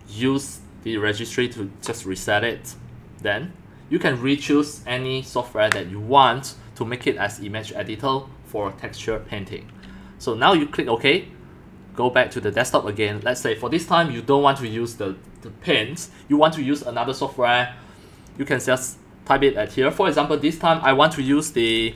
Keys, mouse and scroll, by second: 10.5-21.2 drag, 21.0-21.9 typing, 21.2 Caps_Lock.